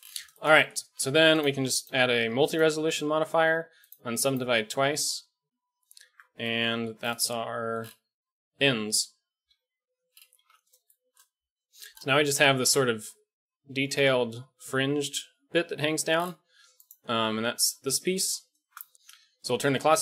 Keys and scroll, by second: 0.8 a, 3.9 typing, 6.0 Tab, 9.4 KP_1, 10.4 ctrl+s, 12.9 g.